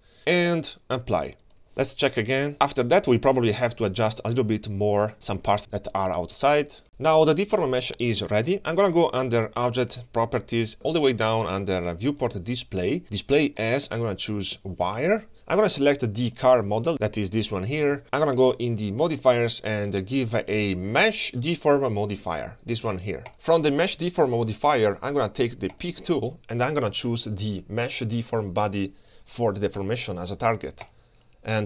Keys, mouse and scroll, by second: 0.5-1.6 drag, 2.0-2.5 middle drag, 4.4 shift+middle click, 4.7 click, 5.3 click, 5.5 click, 5.7 click, 5.9 shift+middle click, 6.2 ctrl+space, 6.5 click, 6.5-8.2 scroll down 5, 6.6 click, 6.9-8.2 scroll up 2, 9.6 click, 12.2 click, 12.2-13.6 scroll down 8, 13.6-15.0 drag, 16.3 click, 16.9 g, 18.9 click, 19.8-23.3 drag, 23.3-24.4 scroll up 4, 25.7 click.